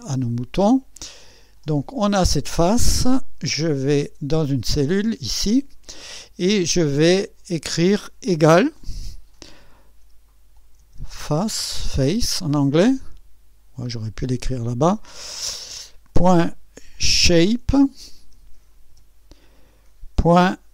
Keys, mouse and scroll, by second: 0.3 click, 3.6 click, 8.9 =, 10.6-12.4 typing, 16.1-20.7 typing.